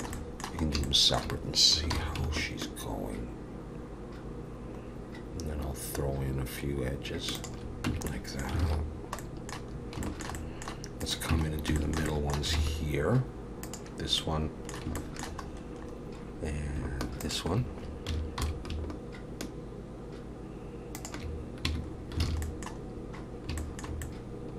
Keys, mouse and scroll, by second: 0.1 middle click, 0.6 scroll up 2, 0.9 shift+middle click, 1.9 ctrl+b, 7.9 Tab, 8.1 middle click, 8.6 alt+a, 8.9-9.7 scroll down 3, 9.2 middle click, 9.7-10.0 scroll up 3, 10.0 shift+middle click, 10.4 middle click, 11.0 click, 11.3 Tab, 11.5-11.8 scroll up 3, 11.8 middle click, 12.1 middle click, 12.6 alt+a, 12.6-13.6 alt+scroll up 1, 13.6 click, 13.6-14.2 scroll up 1, 14.2 middle click, 15.0 shift+middle click, 15.5-16.8 scroll up 4, 16.8 scroll up 1, 17.2 shift+click, 18.4 ctrl+b, 21.7 Tab, 21.9 scroll down 3, 22.2 alt+a, 22.4 middle click, 22.8 scroll down 4, 23.6 shift+middle click, 24.0 middle click.